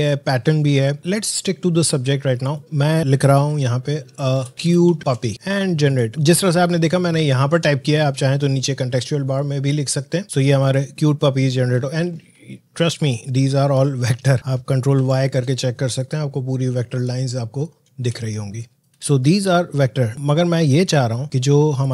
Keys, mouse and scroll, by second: 10.2 click, 12.4 alt+scroll up 1, 13.2 alt+scroll down 1, 14.9 ctrl+y, 15.9 click, 16.7 alt+scroll down 1, 17.4 alt+scroll up 1, 18.1 space, 18.3 click, 18.7 space, 18.9 ctrl+y, 21.8 click.